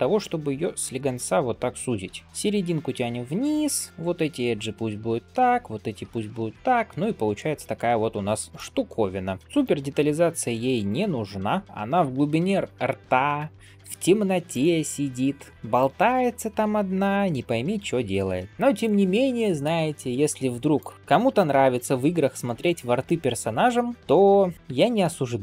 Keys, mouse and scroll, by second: 0.3 s, 1.5 middle click, 2.1 g, 2.2 click, 3.0 middle click, 3.5 click, 3.9 g, 4.5 click, 5.1 g, 6.4 scroll down 1, 6.6 middle click, 7.4 scroll up 2, 7.7 middle click, 8.5 click, 8.6 middle click, 9.4 g, 9.5 click, 9.8 g, 10.9 middle click, 11.4 click, 11.6 middle click, 12.3 g, 13.2 click, 13.7 g, 14.8 click, 15.2 g, 15.9 click, 17.2-18.5 middle drag, 18.5 scroll down 1, 18.7 middle click, 20.6 click, 20.9 middle click, 21.6 g, 22.9-23.9 middle drag, 23.9 alt+click, 23.9 scroll up 1, 24.8 ctrl+click, 25.3 q.